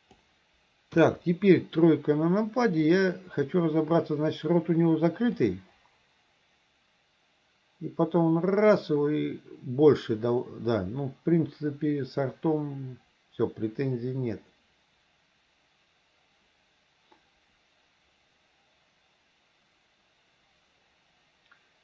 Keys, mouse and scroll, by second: 1.0 KP_3, 2.9 click, 5.5-21.8 drag.